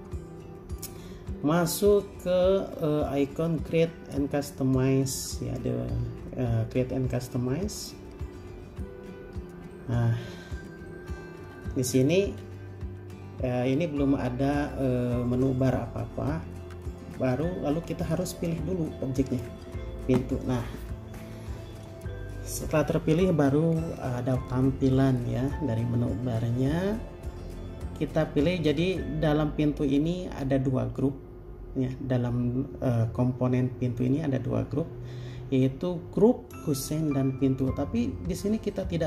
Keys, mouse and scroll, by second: 13.2-14.6 scroll down 1.